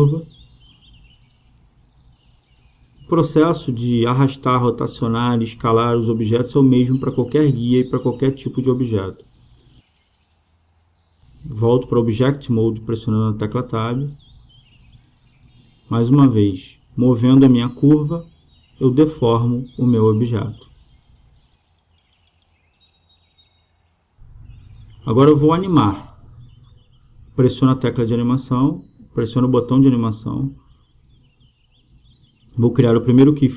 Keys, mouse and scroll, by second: 0.7-2.7 right drag, 1.6-5.8 drag, 3.2 right click, 4.0 right click, 6.0-9.1 right drag, 6.9-9.8 drag, 11.7 Tab, 12.8-14.5 drag, 25.9 right click, 26.8 click, 28.2-29.9 drag.